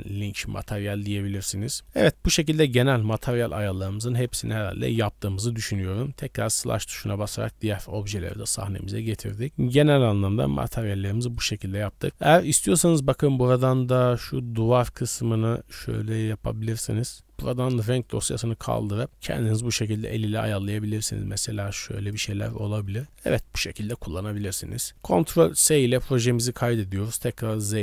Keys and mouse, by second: 1.8-2.3 drag, 3.0 a, 3.2 a, 3.9 ctrl+s, 6.3 alt+h, 7.1 middle drag, 7.7 middle click, 8.1 KP_0, 9.4 shift+middle drag, 11.1-17.2 middle drag, 12.1 KP_Decimal, 18.0 drag, 18.8 click, 22.9-23.4 shift+middle drag, 23.7 shift+middle click, 25.3 ctrl+s, 26.2 shift+middle drag, 26.7 z.